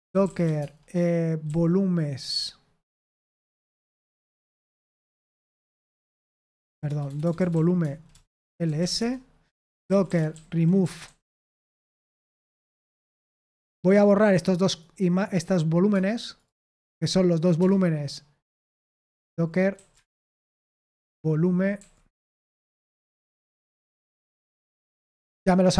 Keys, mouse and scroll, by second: 0.0-1.4 typing, 2.7-5.5 typing, 6.5 ctrl+p, 6.8-13.4 typing, 14.4 click, 14.6 click, 15.2 right click, 15.9 space, 16.2 click, 16.7 right click, 17.5 Return, 19.0 ctrl+p, 19.7 ctrl+a, 20.5 alt+f, 21.1-24.3 typing.